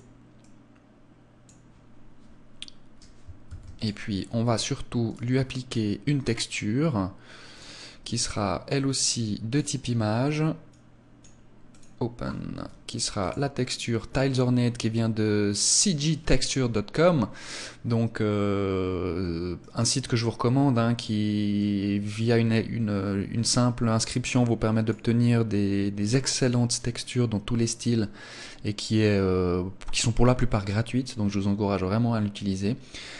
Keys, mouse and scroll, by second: 3.3 ctrl+s, 4.9 click, 7.4 click, 10.5 click, 11.5 click, 19.8 click, 21.4 click.